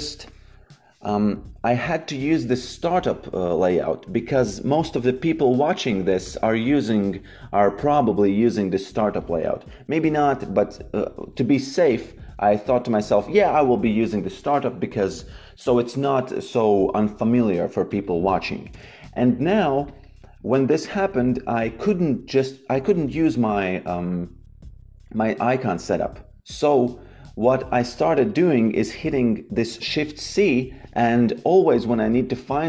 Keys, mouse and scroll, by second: 0.2 click, 5.7 click, 12.6 click, 17.8 click, 18.7 n, 19.4 click, 27.7 click, 29.6 shift+c.